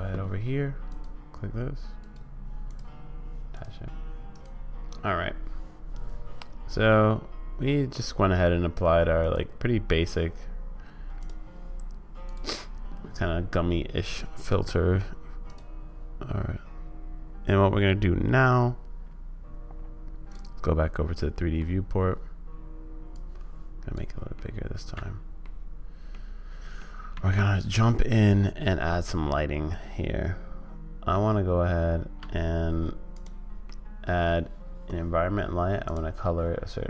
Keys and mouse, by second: 1.0-2.1 drag, 3.5 click, 9.2-12.5 drag, 14.5 click, 15.4-20.3 drag, 21.3 middle click, 23.3 click, 24.3-25.5 middle drag, 26.1 middle click, 27.1 shift+a, 32.6 Escape, 33.6 middle click.